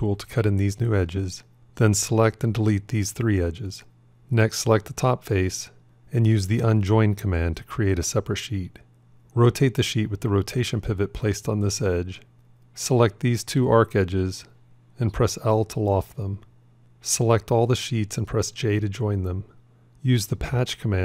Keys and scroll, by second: 9.3-10.1 typing, 14.5 l, 18.8 j.